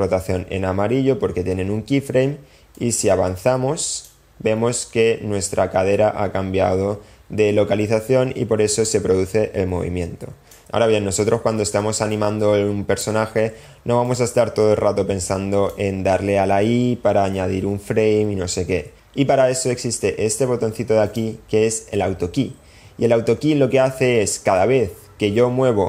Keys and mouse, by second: 2.8-4.1 drag, 8.8-10.6 drag, 12.1-13.1 drag, 14.1-15.7 drag, 21.0 click.